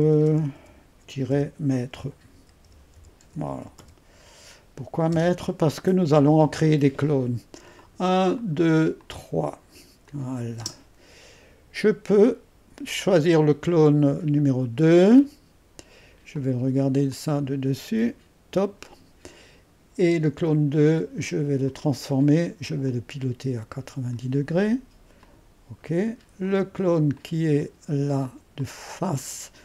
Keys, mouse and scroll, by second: 0.0-4.2 typing, 5.1 Return, 7.7 click, 8.4-10.6 drag, 10.6 space, 13.3-20.8 drag, 16.3 typing, 20.8 middle click, 21.7-29.6 drag, 22.6-23.3 typing.